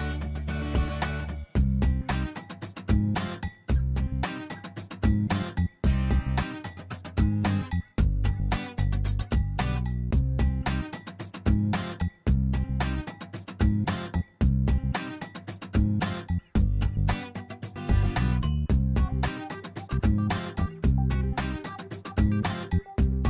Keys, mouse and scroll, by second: 0.7 click, 2.2 click, 3.0 click, 4.1 click, 8.6 click, 9.8 click, 11.1-11.8 scroll up 5, 13.3 click, 16.9 click, 17.9 click, 19.6 click, 21.0-21.6 scroll down 4, 21.6 middle click, 22.1-22.4 scroll down 3, 22.5 middle click.